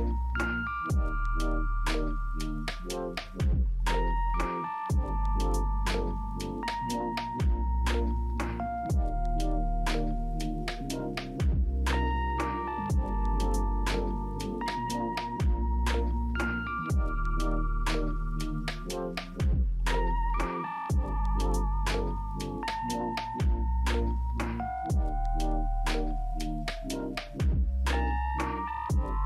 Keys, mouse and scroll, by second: 6.7 right click, 14.2 right click, 15.7 double click.